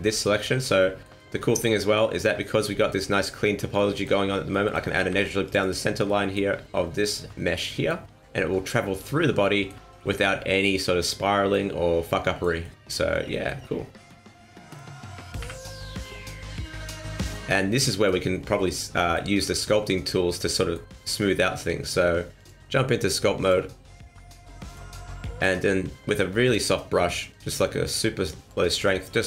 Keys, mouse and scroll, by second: 0.0 middle click, 0.3 middle click, 1.1 middle click, 2.7 middle click, 3.7 middle click, 4.5 middle click, 5.1 ctrl+r, 6.0 middle click, 7.5 middle click, 9.4 middle click, 10.0 middle click, 12.0 middle click, 12.6 middle click, 13.3 shift+middle click, 13.7-14.1 scroll up 2, 13.9 middle click, 15.3 KP_1, 16.3 scroll up 2, 17.2 scroll down 4, 17.5 middle click, 18.3 scroll down 3, 18.5 middle click, 19.3 middle click, 20.5 middle click, 21.0 shift+middle click, 21.1 shift+middle click, 22.3 click, 24.6 click, 25.1 scroll up 2, 25.2 middle click, 25.9 f, 27.3 click, 28.7 scroll up 1, 28.9 middle click.